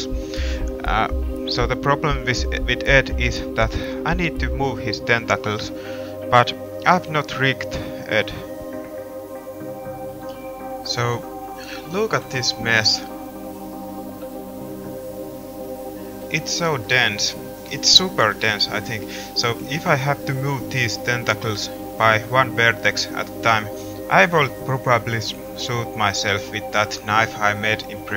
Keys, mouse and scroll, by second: 3.2 middle click, 3.4 middle click, 4.5 middle drag, 6.3 middle click, 6.9 middle click, 7.1 middle drag, 7.4 middle click, 7.8 middle drag, 8.7 middle drag, 14.7 middle click, 15.4 Tab, 19.3 right click, 24.8 middle click, 28.0 middle click.